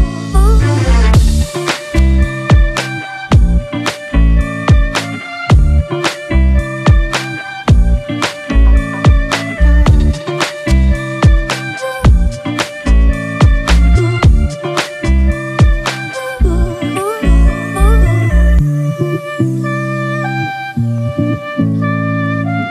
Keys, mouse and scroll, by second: 1.8-5.0 scroll down 1, 7.8-8.4 typing, 12.2 typing, 14.0 double click.